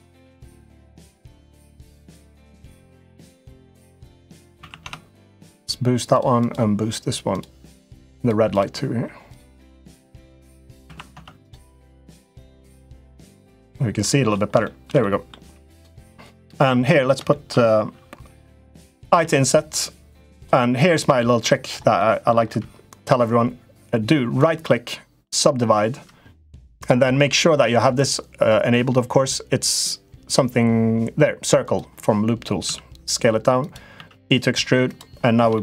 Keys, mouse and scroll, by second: 0.6 click, 1.6 click, 2.9-5.9 drag, 6.1-7.1 drag, 7.9 click, 8.3 click, 9.0-11.2 drag, 11.5 middle click, 12.3 shift+middle click, 13.8 middle click, 14.4 shift+middle click, 14.7 middle click, 15.5 click, 15.7 Tab, 16.3 middle click, 17.0 shift+middle click, 18.9 i, 20.6 middle click, 21.1 shift+middle click, 21.8 middle click, 24.3 right click, 27.8 click, 31.4 click, 32.4 s, 33.7 e, 35.4 middle click.